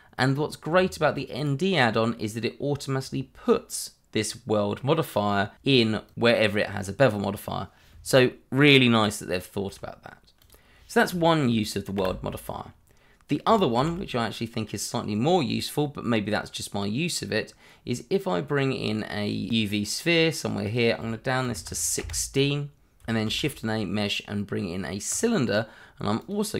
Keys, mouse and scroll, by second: 0.7 Tab, 1.3 click, 1.7 middle click, 5.5 click, 5.8 double click, 7.1-7.6 scroll down 2, 10.4 click, 12.0 Delete, 13.8 shift+a, 19.5 click, 21.4 1, 21.6 6, 22.0 Return, 23.0 click, 23.2 shift+a, 25.1 click.